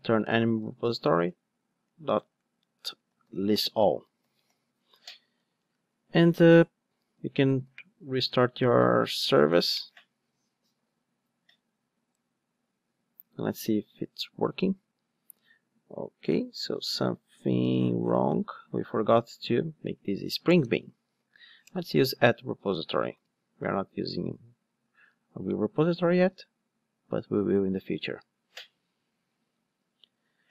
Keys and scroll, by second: 3.6 Return, 4.4 alt+super+l, 7.8 ctrl+r, 9.2 ctrl+d, 21.7 Return, 23.1 alt+super+l, 26.2 ctrl+d.